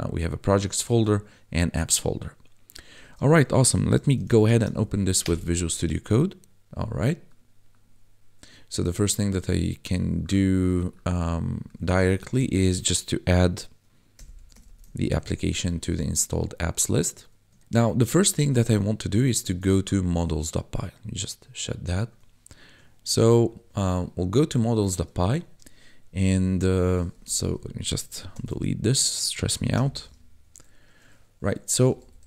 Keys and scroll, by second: 3.9-4.6 typing, 5.2 Return, 12.3 Return, 14.1 ', 14.3 a, 14.5 p, 15.0 ctrl+s, 17.6 ctrl+s, 23.1 F11, 27.5 Up, 28.3 ctrl+shift+k, 29.7 ctrl+b, 31.7 c, 31.8 l, 31.9 a.